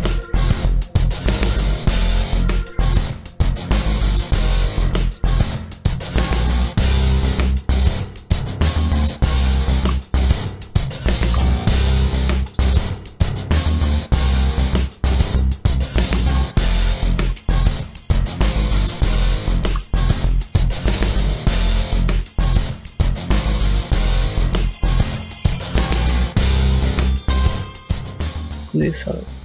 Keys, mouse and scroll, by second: 0.9 right click, 1.6 shift+right click, 2.1 click, 2.7 middle click, 3.4 click, 3.8 Tab, 4.0 scroll down 3, 4.1 middle click, 4.4 scroll up 1, 4.5 Tab, 4.8 middle click, 5.1 scroll up 2, 5.8 scroll down 1, 6.4 shift+middle click, 9.2 alt+right click, 9.6 x, 10.7 alt+right click, 11.0 x, 12.0 alt+right click, 12.4 x, 13.1 alt+right click, 13.5 x, 14.0 scroll down 1, 14.2 middle click, 15.1 alt+right click, 15.7 alt+right click, 16.1 x, 16.9 alt+right click, 17.2 x, 18.4 alt+right click, 19.2 alt+right click, 19.4 x, 20.0 a, 20.2 scroll down 2, 20.4 shift+middle click, 20.9 middle click, 21.3-22.0 scroll up 2, 22.1 middle click, 23.8 middle click, 23.8 right click, 24.5 shift+right click, 25.7 middle click, 26.0 scroll up 1, 26.4 middle click, 27.4 shift+middle click, 28.8 click.